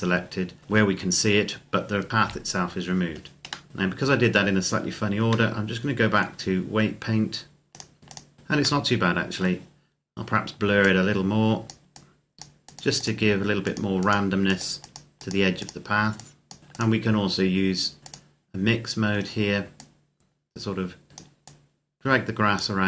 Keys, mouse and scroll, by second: 2.1 KP_0, 3.5 middle click, 4.3-4.9 scroll down 1, 5.3 middle click, 7.5 click, 8.7 middle click, 10.7 click, 18.4 scroll down 1, 18.6-19.6 scroll up 1, 19.6 click.